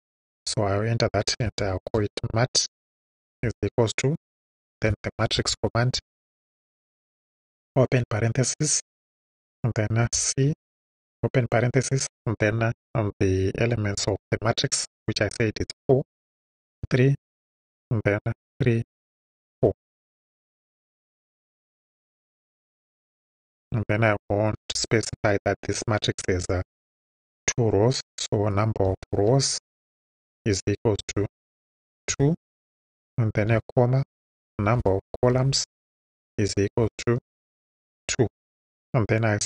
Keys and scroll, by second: 1.0-7.5 typing, 10.0 c, 10.6 shift+c, 11.0 shift+9, 15.6 4, 16.1 ,, 16.8 3, 17.3 ,, 18.5 3, 18.9 ,, 19.5 4, 23.5 Right, 26.1 n, 28.7-31.0 typing, 32.1 2, 33.5 ,, 34.5 n, 35.3 l, 36.8 =, 38.0 2.